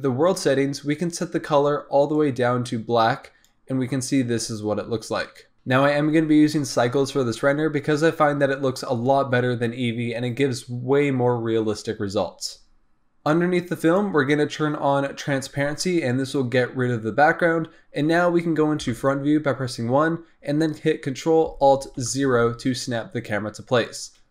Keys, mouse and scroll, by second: 1.0 click, 5.0 scroll down 2, 5.2-5.5 middle drag, 13.8-14.3 drag, 15.0 click, 18.8 KP_1, 22.0 ctrl+alt+KP_0, 23.8-24.3 drag.